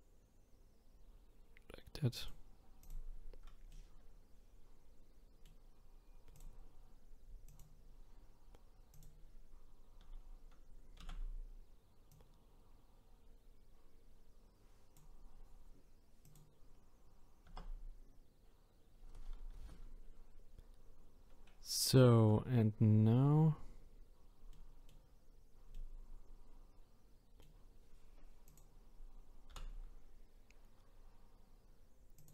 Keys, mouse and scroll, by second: 2.8 click, 3.7-6.3 middle drag, 6.3-7.6 drag, 8.9-11.1 drag, 11.1 a, 12.1 click, 16.2 click, 17.7 Tab, 24.5-28.5 middle drag, 28.5 click, 29.5 r.